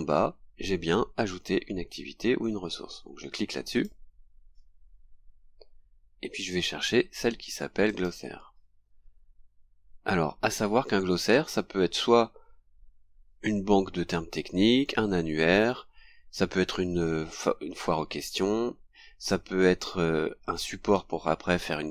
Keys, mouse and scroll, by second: 3.7 click, 6.4-6.8 scroll down 1, 7.9 click, 9.7-10.1 scroll down 2, 10.6-10.9 scroll down 1, 11.6-11.9 scroll down 2, 12.8-13.1 scroll down 2.